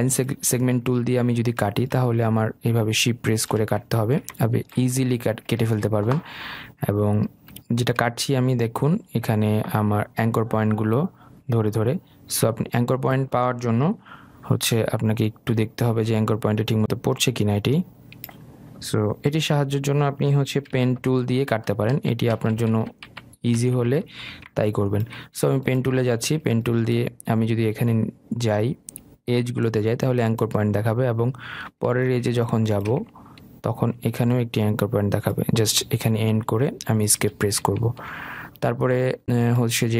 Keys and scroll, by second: 19.8 Delete, 21.0 ctrl+z, 21.9 ctrl+alt+z, 23.0 ctrl+z, 36.4 Escape.